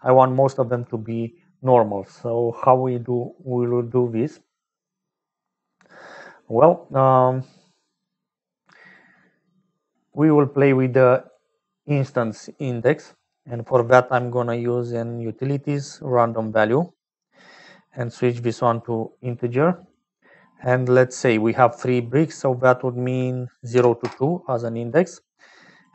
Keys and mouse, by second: 8.1 click, 13.4 click, 13.9 shift+a, 18.0-20.3 drag, 22.5-24.7 drag, 25.8-25.9 drag.